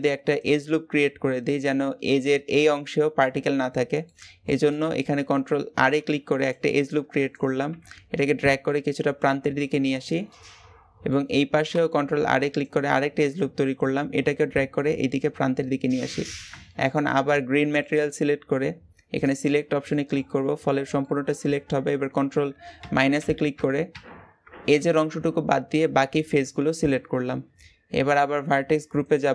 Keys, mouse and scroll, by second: 3.4-3.8 scroll down 2, 3.8 middle click, 4.6 click, 5.7 ctrl+r, 7.6 g, 10.1-11.5 shift+middle drag, 11.5 ctrl+r, 13.6 g, 16.3-19.2 middle drag, 19.2 click, 19.7 shift+middle click, 20.1-20.9 scroll up 2, 20.9-22.7 shift+middle drag, 22.7 ctrl+KP_Subtract, 23.0 ctrl+KP_Subtract, 23.7 ctrl+KP_Subtract, 26.0-26.4 scroll down 1, 26.4-29.3 shift+middle drag.